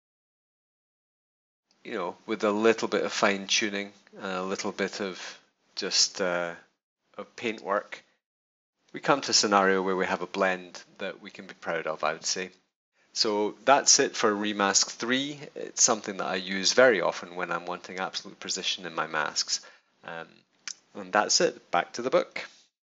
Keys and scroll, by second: 8.4 super+-.